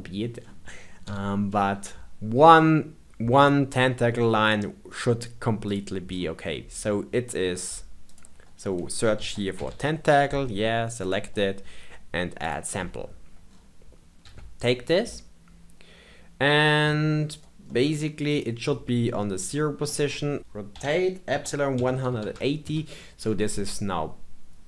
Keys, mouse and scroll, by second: 1.0 KP_1, 1.7-4.0 scroll down 1, 5.6 click, 6.0-6.3 scroll down 8, 8.0-11.0 drag, 12.3-13.4 drag, 13.4-14.2 scroll down 5, 14.2 g, 19.1 scroll up 2, 19.5-20.4 shift+middle drag, 20.7 r.